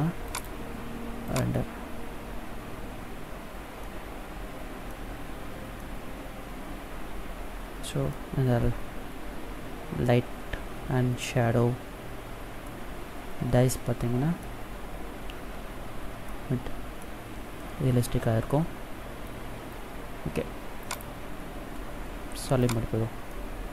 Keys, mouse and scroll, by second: 0.0 click, 3.8 middle click, 5.7 middle click, 12.6 middle click, 14.6-15.0 scroll up 2, 16.2 middle click, 20.8 click, 23.2 middle click.